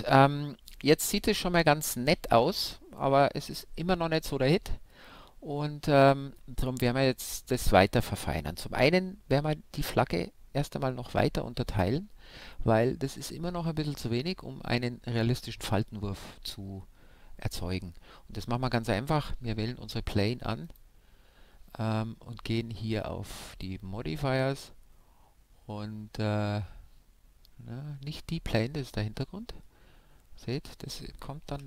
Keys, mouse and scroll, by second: 7.4 middle click, 7.7-9.1 scroll up 1, 9.1-9.6 scroll up 1, 20.6-22.5 drag, 23.5-25.2 drag, 25.2-28.2 scroll up 1, 28.2-29.8 scroll up 1, 29.8-30.7 scroll down 1, 30.7-31.6 scroll down 1.